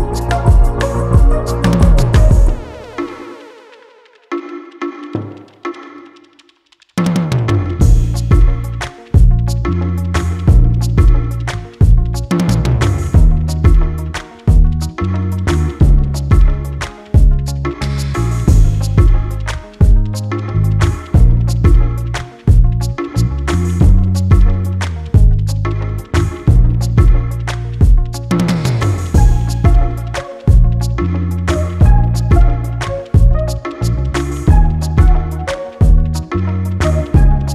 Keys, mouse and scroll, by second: 5.8 click, 10.7 click, 12.1 click, 14.9 click, 16.9 click, 18.7 click, 21.1 click, 22.1 scroll down 1, 22.9 click, 24.9 click, 25.5 ctrl+s, 27.6-28.2 scroll up 1, 28.2 click, 31.2 scroll down 1, 31.7 click, 33.7 click, 34.0 scroll down 1, 34.3 click.